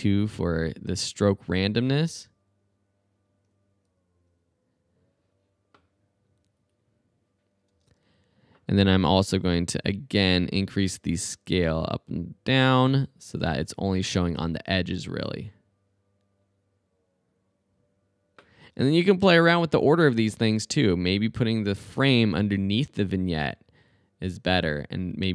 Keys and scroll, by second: 7.7 space, 14.7 space, 18.6 space.